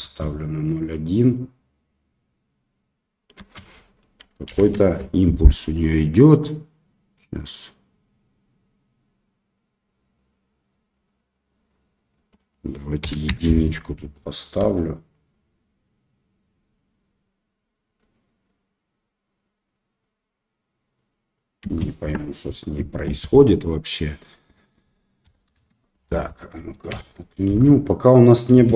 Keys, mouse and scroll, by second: 0.0 space, 3.7 space, 4.5 shift+Left, 12.3-13.7 drag, 14.1 middle click, 14.6 space, 23.9 space, 24.6-26.0 drag, 26.9 shift+Left, 27.5 space, 28.6 middle drag, 28.6 space.